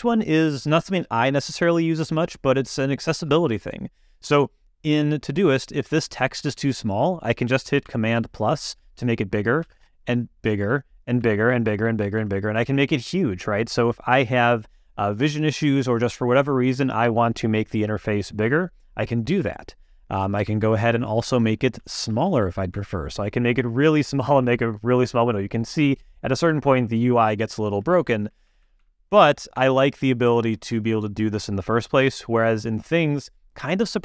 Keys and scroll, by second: 8.1 super+=, 9.6 super+=, 19.3 super+0, 20.4 super+-, 28.1 super+=.